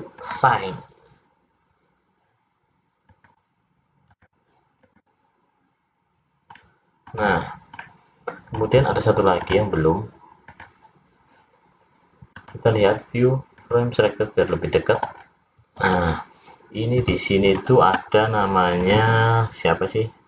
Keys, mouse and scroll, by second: 0.4 click, 3.4 click, 4.9 click, 5.8 click, 6.7 middle click, 7.4-7.9 scroll down 3, 7.9 middle click, 10.3 click, 10.6 click, 12.5 click, 15.3-15.6 scroll down 3, 16.1 middle click, 18.9 click.